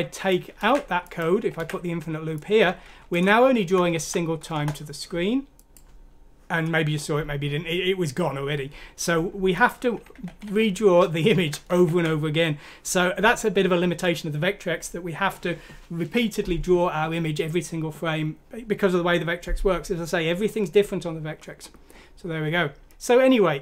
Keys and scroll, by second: 0.6 ctrl+c, 1.6 ctrl+v, 3.1 Delete, 4.0 F6, 4.5 Return, 10.1 ctrl+z, 10.4 ctrl+z, 11.3 ctrl+z, 11.7 ctrl+z.